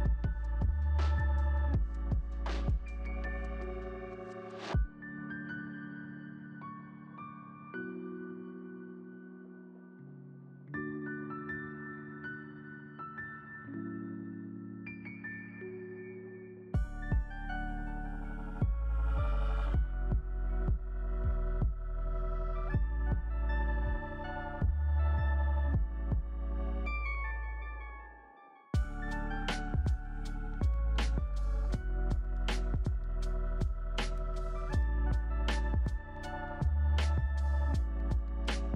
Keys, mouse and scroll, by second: 9.9-10.6 scroll down 4, 10.6-11.1 scroll up 5, 11.7-14.7 scroll up 6.